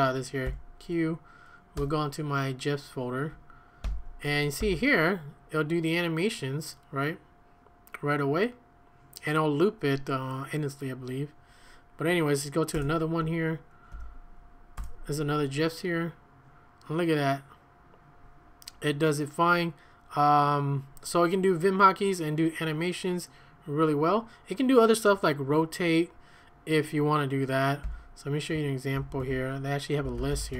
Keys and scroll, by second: 0.4 q, 1.8 Tab, 3.8 l, 4.6 f, 12.7 Return, 13.9 l, 14.8 Return, 27.8 q, 28.9 ctrl+a, 29.2-30.5 typing.